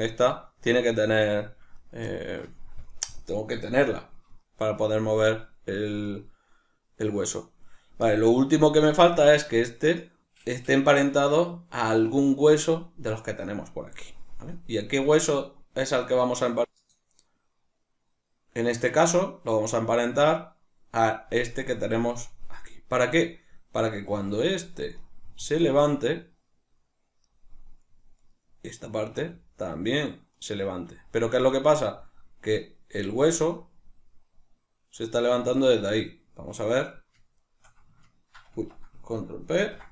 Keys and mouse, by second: 0.0-1.9 ctrl+middle drag, 0.9 r, 1.9 right click, 2.1-6.1 ctrl+middle drag, 6.1 right click, 9.9 right click, 18.9 right click, 23.9 r, 24.9 right click, 25.3 r, 27.3 right click, 28.1 right click, 29.1 r, 30.4 right click, 30.8 r, 31.9 right click, 33.0 r, 35.1 right click, 36.3 right click, 36.9 right click, 37.3 shift+right click, 38.5 Tab.